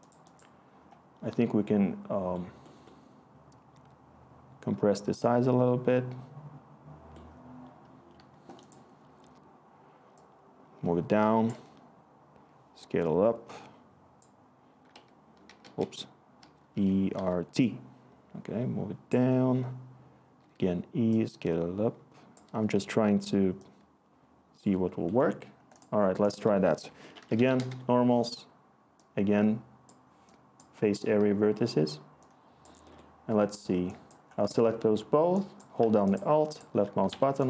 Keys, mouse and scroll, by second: 11.5 typing, 14.6-17.6 typing, 20.1-20.9 typing, 22.4 t, 26.8 Tab, 26.9-27.8 typing, 37.1 Escape.